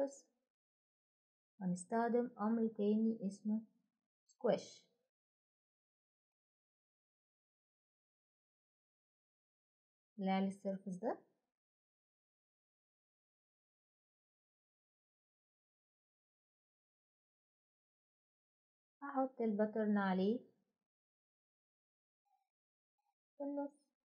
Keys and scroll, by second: 0.0-0.2 typing, 5.6-6.3 typing, 23.9 Return.